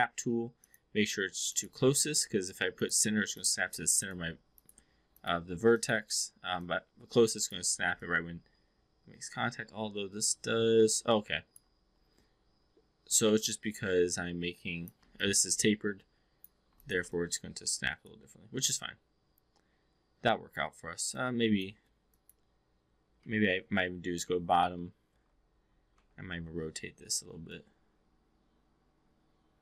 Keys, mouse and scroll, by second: 0.8-3.8 drag, 3.9 click, 4.4 click, 5.0 click, 5.8 click, 6.5-7.5 drag, 7.9-11.6 alt+drag, 13.0-14.9 drag, 15.1-16.6 alt+drag, 17.1-20.6 alt+drag, 21.0-21.6 alt+drag, 22.0 click, 23.1 v, 25.1 e, 25.2 3, 25.8 3, 26.2 e, 27.4-29.6 drag.